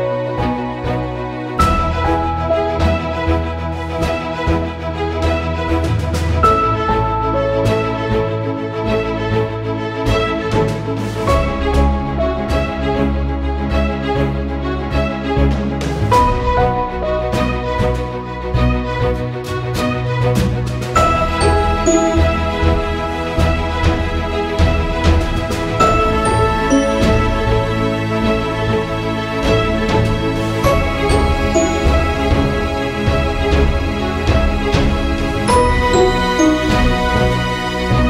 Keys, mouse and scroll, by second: 2.8 click, 8.4 click, 11.0 click, 13.5 Return, 15.7 click, 16.5 ctrl+c, 16.7 ctrl+v, 18.0 ctrl+z, 18.4 click, 18.8 ctrl+c, 19.1 ctrl+f, 19.7 right click, 20.3 click, 22.0 typing, 24.6 shift+click, 24.9 right click, 26.4 click, 30.7 click, 31.8 ctrl+s, 33.2-38.0 drag.